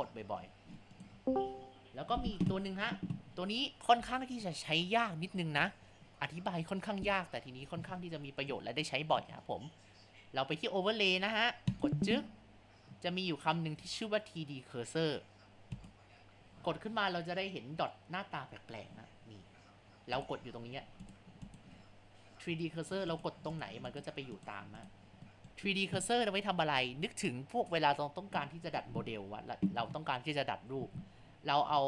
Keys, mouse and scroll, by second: 1.3 ctrl+z, 11.7 click, 20.8 Down, 21.1 click, 21.5 click, 23.1 click, 23.6 click, 23.9 click, 24.4 click, 24.8 click, 25.3-28.3 shift+middle drag, 28.7 scroll down 2, 29.4 scroll up 1.